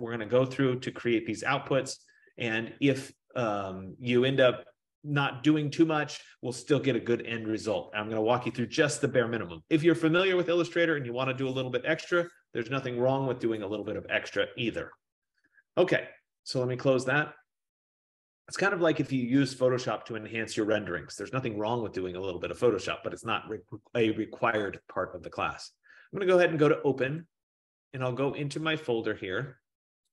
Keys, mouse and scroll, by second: 6.9 F15, 16.6 click, 25.1 click, 27.3 click.